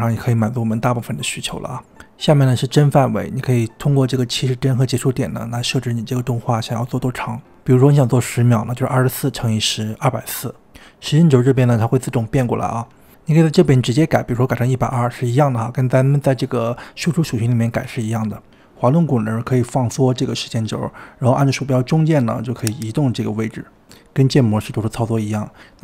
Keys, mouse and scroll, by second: 9.4 click, 13.1-16.1 drag, 18.6-19.0 scroll up 1, 19.0-19.3 scroll down 2, 19.3-20.2 scroll up 11, 20.2-22.0 scroll down 17, 22.0-22.8 scroll up 7, 22.8-24.2 middle drag, 24.2-24.9 scroll up 2, 24.9-25.8 scroll down 1.